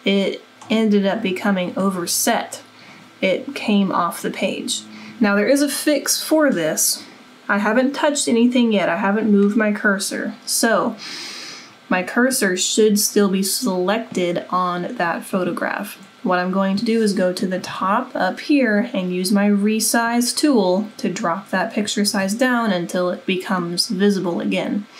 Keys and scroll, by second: 17.8 super+=, 22.2 super+=, 22.3 super+-.